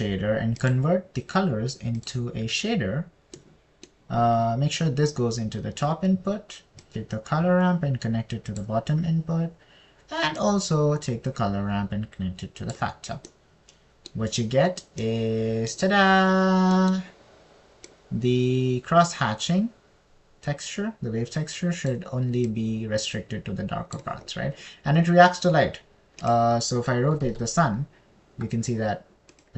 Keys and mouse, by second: 4.8-5.8 drag, 4.8-5.8 middle drag, 4.8-5.8 right drag, 8.2 click, 11.8 click, 11.8 right click, 18.2 middle click, 19.3-23.3 drag, 24.0 click, 24.1 right click, 24.5 middle click, 27.6 click, 28.6 r, 28.7 z.